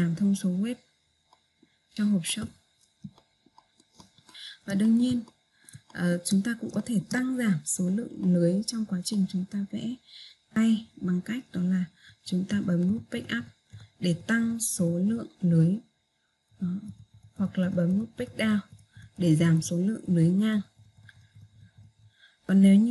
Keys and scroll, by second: 13.6 Page_Up, 18.6 Page_Down.